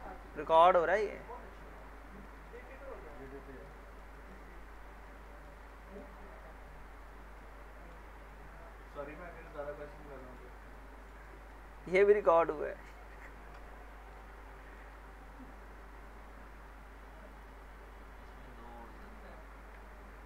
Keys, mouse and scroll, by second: 0.3 click, 1.0 middle click, 1.3 scroll up 1, 1.6 alt+middle click, 2.0 scroll up 1, 2.2 alt+middle click, 2.6-3.1 scroll down 1, 3.1 alt+middle click, 3.4 scroll up 1, 3.7 alt+middle click, 4.5 scroll up 1, 4.8 alt+middle click, 5.7 alt+middle click, 6.3-7.3 scroll up 1, 7.4-8.0 alt+middle click, 8.0 scroll down 1, 8.6-9.5 alt+middle drag, 9.6 scroll up 1, 10.2 middle click, 11.0-11.5 alt+middle drag, 12.9 click, 13.5 Delete, 13.8 scroll down 1, 14.2 alt+middle click, 14.2-14.8 alt+middle click, 15.0-16.8 scroll up 1, 17.3 click, 19.3 scroll up 1.